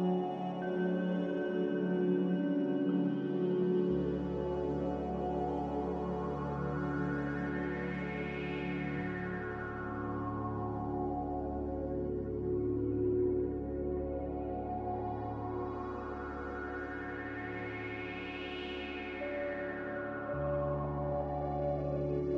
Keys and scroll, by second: 3.0-3.6 typing, 4.5 Return, 6.9-7.3 typing, 7.5 Return, 9.1 ctrl+z, 10.0-12.5 typing, 13.8-15.3 typing, 17.6-18.3 typing, 20.4-21.2 typing.